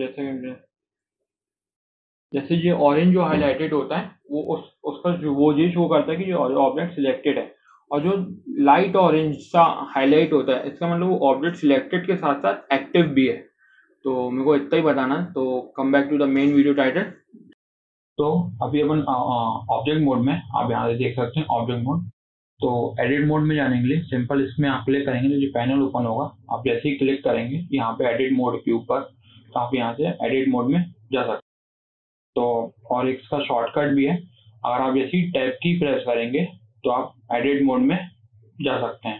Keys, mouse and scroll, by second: 0.9 scroll up 2, 1.1-4.2 shift+middle drag, 7.1-10.2 scroll up 1, 22.7-25.8 drag, 32.7-35.2 drag, 35.2 Tab.